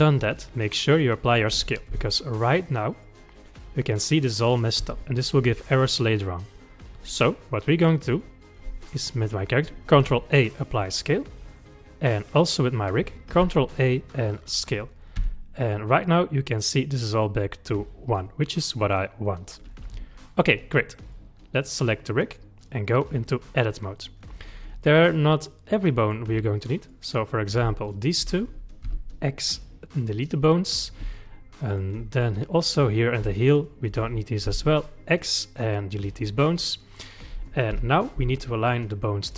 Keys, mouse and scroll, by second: 1.9 n, 3.0 click, 4.8 n, 8.1 click, 10.0 ctrl+a, 12.1 click, 13.4 ctrl+a, 15.2 n, 18.8 click, 19.9 n, 21.1 click, 22.6-24.3 drag, 24.3-25.3 scroll up 3, 25.3-26.9 middle drag, 26.9 click, 27.9 shift+click, 28.9 x, 31.2-32.2 shift+middle drag, 32.2-32.8 scroll up 2, 32.8 click, 33.6 shift+click, 34.5 x, 36.2-36.9 scroll down 4, 36.9 middle click, 37.8 KP_1, 38.9 shift+middle click.